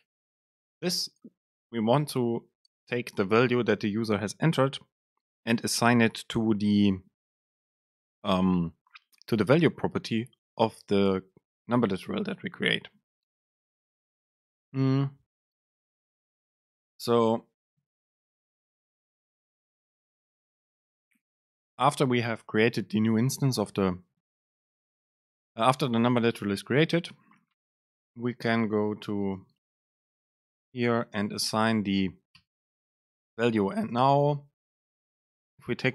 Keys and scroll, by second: 18.1 ctrl+shift+super+Left, 19.0 BackSpace, 20.9 End, 21.7 Return, 29.6 super+space.